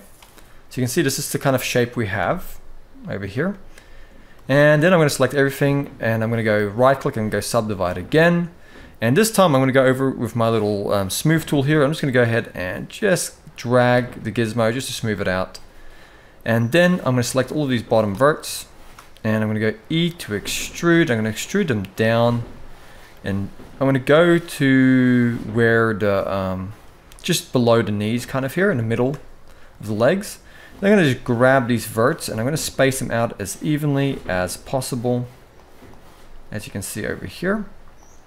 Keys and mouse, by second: 0.7 shift+middle click, 1.9 a, 3.2 shift+middle click, 4.3 shift+middle click, 6.2 right click, 11.8-13.8 drag, 14.8 shift+middle click, 16.8-17.8 drag, 18.2 shift+middle click, 20.0 e, 22.2 shift+middle click, 22.8 g, 28.5 shift+middle click, 30.4 click, 30.7 g, 32.4 g, 33.5 click, 34.2 g, 35.6 click, 35.7 g, 37.0 g.